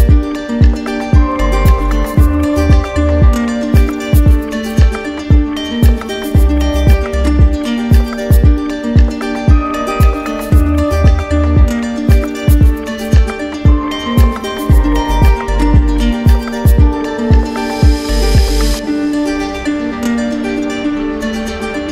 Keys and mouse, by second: 1.3 right click, 7.1 right click, 15.1 right click, 15.7 w, 18.7 click, 19.6 right click, 20.1 shift+right click, 21.3 shift+right click, 21.5 alt+right click.